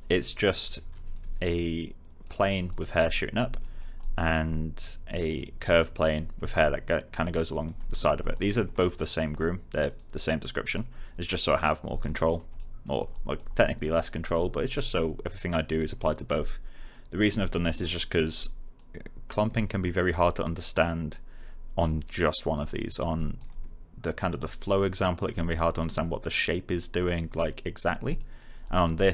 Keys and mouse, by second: 1.4 alt+click, 3.5 alt+middle click, 3.9 alt+click, 12.5 alt+middle click, 13.0 click, 16.9 click, 18.7 click, 22.5 alt+click, 22.8 alt+middle click, 23.1 alt+click, 28.1 alt+middle click, 28.6 alt+click.